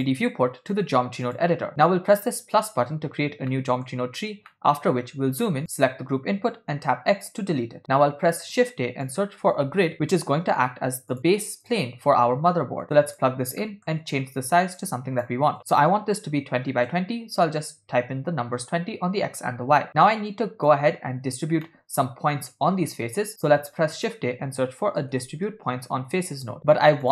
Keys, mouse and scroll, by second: 0.0-1.5 drag, 2.6 click, 3.5 middle click, 4.6-5.6 ctrl+middle drag, 5.7 click, 7.1 x, 7.8 middle click, 8.5 shift+a, 12.3-13.3 drag, 13.7 middle click, 14.8-16.7 shift+drag, 20.1 click, 20.3 click, 21.6 ctrl+middle click, 23.4 shift+a.